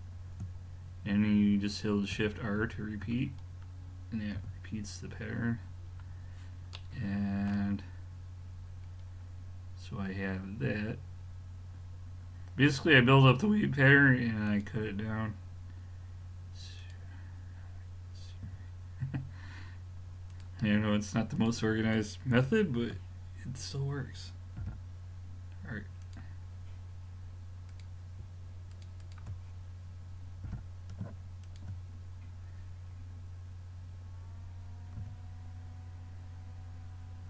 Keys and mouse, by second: 2.2 shift+r, 2.6 shift+r, 3.3-4.9 middle drag, 4.4 a, 8.9-10.2 middle drag, 12.7-16.2 drag, 16.8-18.6 drag, 18.5 a, 20.3-23.2 drag, 24.6 g, 27.7-30.9 drag, 30.5 g, 35.0 a.